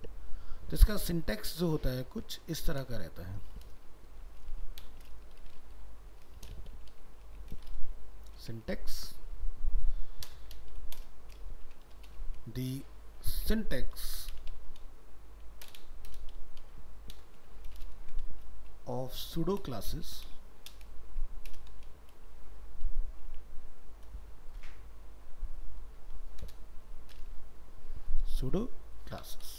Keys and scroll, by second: 8.6 ctrl+s, 18.0 ctrl+Left.